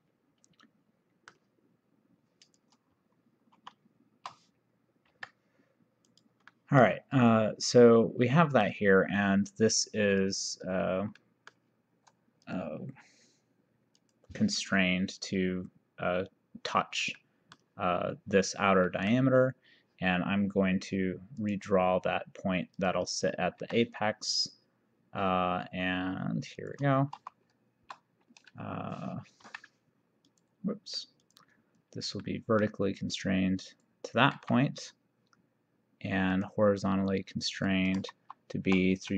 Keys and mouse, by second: 2.5 click, 3.7 shift+r, 5.1 Escape, 6.2 click, 6.6 middle click, 8.3 middle click, 10.3 click, 11.3 middle click, 12.5 click, 14.0 click, 17.3 middle click, 18.9 middle click, 21.4 click, 22.8 click, 23.7 Escape, 24.5 click, 26.6 click, 27.3 shift+h, 29.5 Escape, 30.3 click, 32.3 middle click, 33.7 click, 34.4 v, 36.3 click, 37.6 click, 38.3 shift+h.